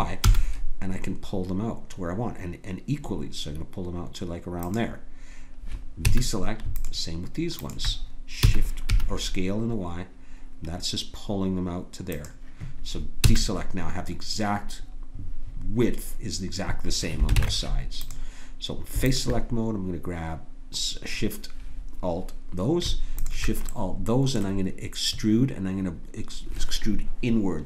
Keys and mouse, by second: 6.1 a, 6.8-9.4 drag, 8.5 s, 13.2 a, 17.4 ctrl+Tab, 19.1-22.7 drag, 23.1-26.0 drag.